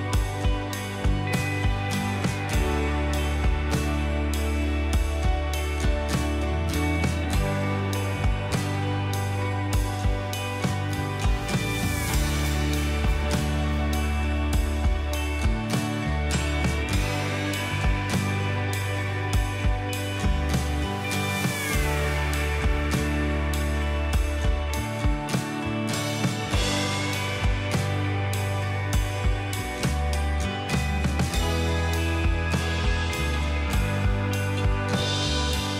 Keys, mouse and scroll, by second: 1.1 double click, 1.6 alt+scroll down 1, 6.7 Return, 6.7-8.9 alt+scroll down 1.